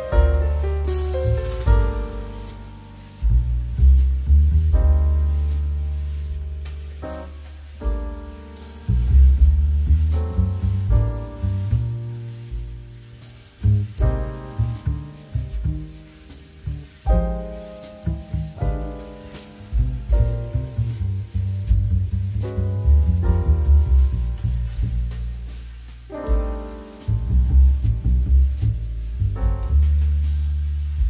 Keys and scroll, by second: 0.3 3, 0.7 2, 1.2 space, 4.7 space, 6.5 z, 11.7 1, 21.0 a, 22.6 z.